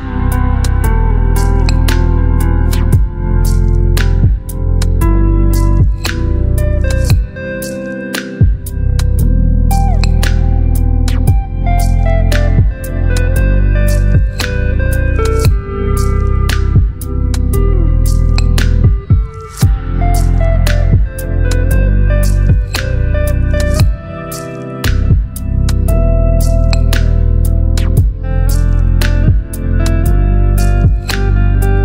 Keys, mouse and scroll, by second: 10.9 right click, 12.6 click, 14.0 ctrl+click, 19.3 click, 19.8 alt+BackSpace, 21.4 ctrl+d, 27.2 t, 28.4 click, 30.2 shift+e, 31.5 shift+o.